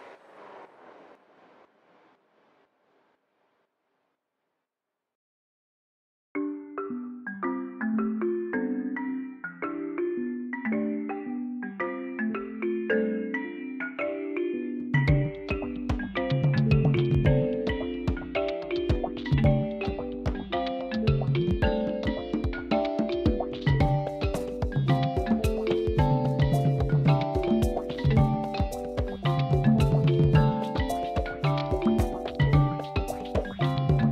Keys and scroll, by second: 5.6 w, 5.9 o, 6.8 Return, 16.3 ctrl+shift+t, 31.8 Tab.